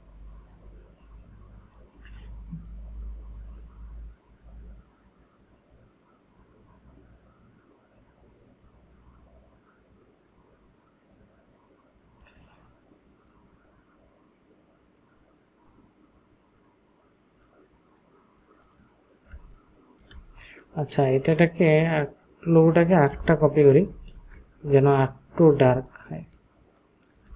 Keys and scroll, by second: 19.4 ctrl+space, 23.9 ctrl+j, 25.7 ctrl+space.